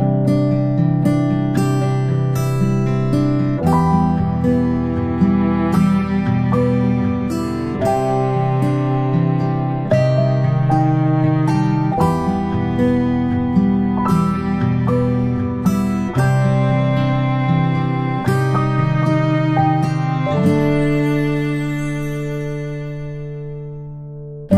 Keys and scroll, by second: 4.4 ctrl+z.